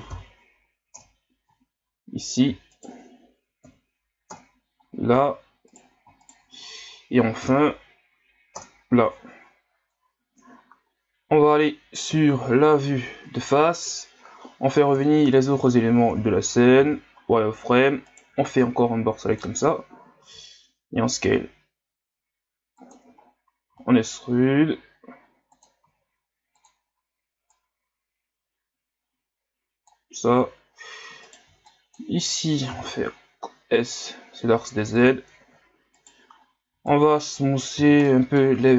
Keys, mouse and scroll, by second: 0.1 m, 2.2 right click, 2.7 shift+right click, 3.6 m, 5.7 right click, 6.2 shift+right click, 7.4 m, 12.1 KP_1, 13.9 KP_Divide, 14.9 KP_1, 16.4 scroll down 5, 16.8 z, 17.1 scroll up 2, 18.1 right click, 18.3 b, 23.2 scroll down 2, 23.7 e, 25.8 s, 27.5-30.5 drag, 31.2 right click, 31.4 b, 35.9 right click, 36.7 b, 38.1-38.7 middle drag.